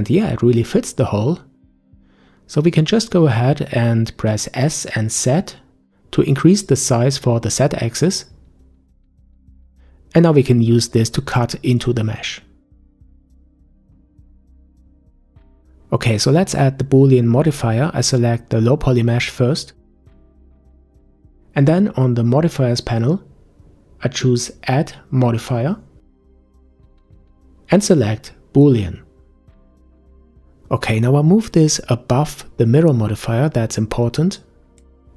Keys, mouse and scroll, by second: 3.3-3.9 scroll down 1, 3.9-4.9 middle drag, 4.9-5.4 scroll up 5, 7.1 s, 12.2 click, 14.5 shift+middle click, 15.4 Tab, 17.6 click, 21.1 click, 26.5-29.5 drag, 32.0-34.7 drag.